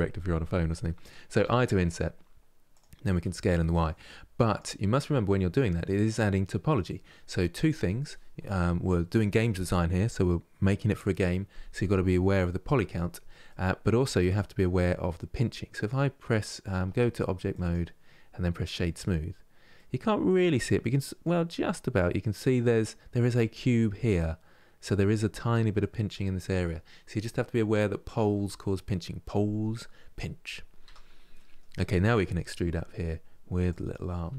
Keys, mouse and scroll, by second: 4.7-5.2 scroll up 2, 5.2-8.2 middle drag, 13.2-15.4 middle drag, 15.4-16.4 right drag, 16.4 Tab, 17.2-18.9 right drag, 18.9 scroll down 2, 19.4-30.5 middle drag, 30.5 Tab, 31.0-32.3 middle drag, 32.3 e, 34.0 e.